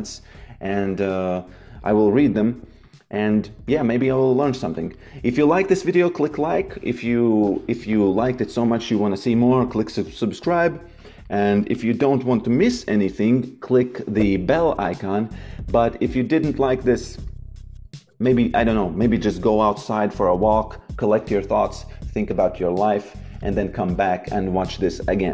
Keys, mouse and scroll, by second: 2.3 click, 4.7 click, 7.4 click, 10.9 click.